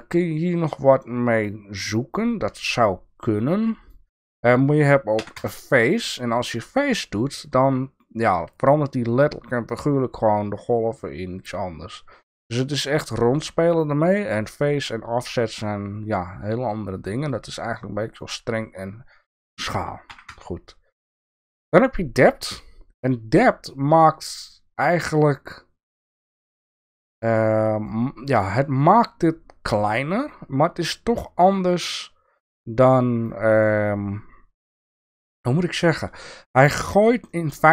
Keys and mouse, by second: 22.4-27.9 middle drag.